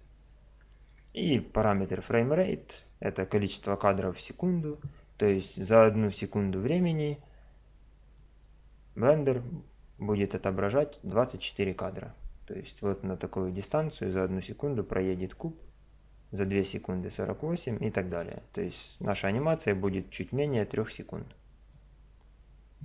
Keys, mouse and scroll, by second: 8.1-10.1 drag.